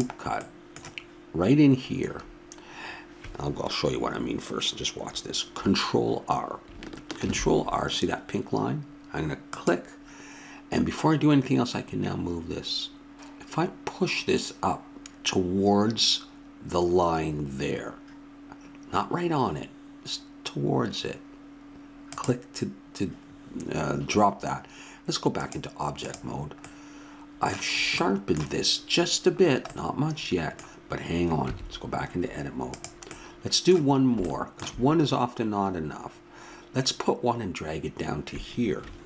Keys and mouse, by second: 3.1-7.2 middle drag, 7.2 ctrl+r, 25.4-27.0 drag, 26.6 middle drag, 26.8-28.1 middle drag, 27.0 drag, 29.8-31.4 middle drag, 31.4 Tab.